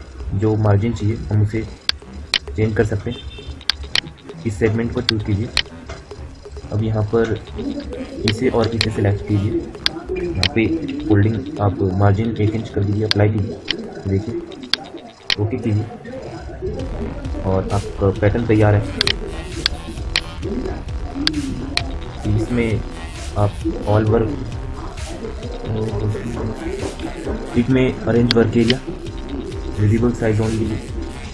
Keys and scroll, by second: 26.8 F9.